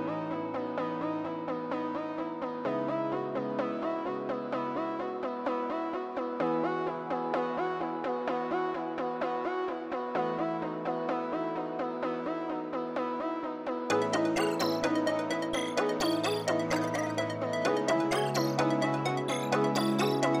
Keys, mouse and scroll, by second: 1.9 middle click, 6.4 middle click, 14.0 middle click, 15.2 scroll up 1.